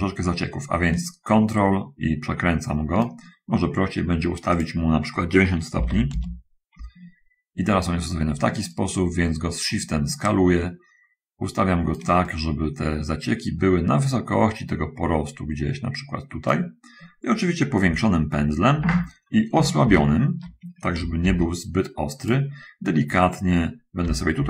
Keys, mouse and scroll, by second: 1.2-3.5 ctrl+right drag, 3.8 middle click, 4.8 click, 6.0 9, 6.4 Return, 6.4 0, 9.0-10.6 shift+right drag, 10.6-12.4 shift+middle drag, 12.6-17.0 shift+right drag, 18.1 ], 18.4 ], 20.1 shift+a, 21.5 shift+f, 22.5 click, 24.3 [.